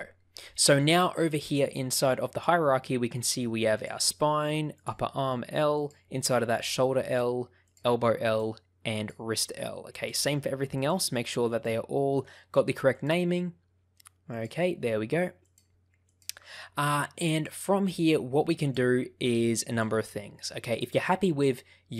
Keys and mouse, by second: 1.9 click, 4.8 click, 5.7 click, 6.4 click, 7.1 click, 7.6 click, 8.9 click, 9.9 click, 10.7 click, 11.4 click, 13.0 click, 14.2 click, 15.4 click, 18.5 click, 19.6 click, 21.4-21.9 middle drag.